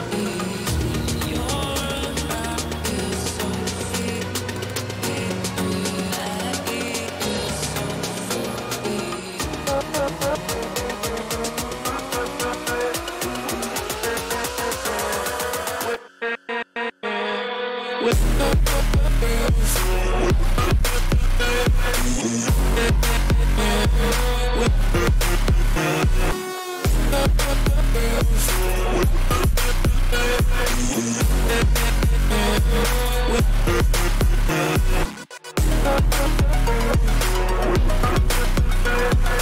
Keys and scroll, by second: 22.6 ctrl+shift+a.